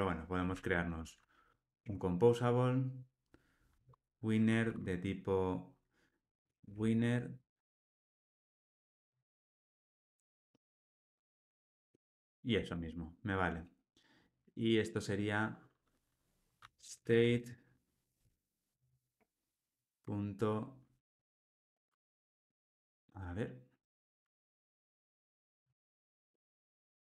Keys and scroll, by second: 0.7 alt+Return, 12.0 Tab, 18.2 Escape, 21.1 alt+shift+space.